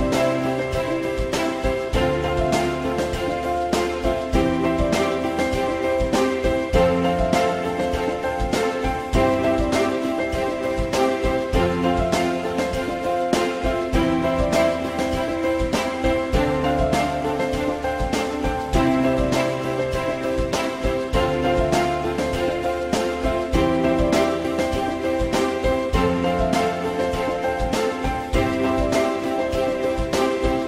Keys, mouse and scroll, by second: 1.8 click, 2.9 click, 6.1 click, 10.0 click, 23.0 click, 25.4 click, 26.7 click, 29.1 click.